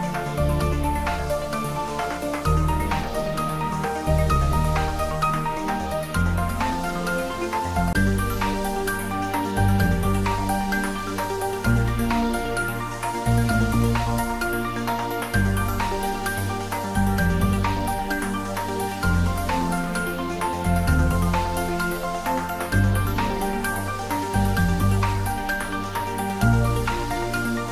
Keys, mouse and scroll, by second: 14.3 scroll down 1, 20.0 click.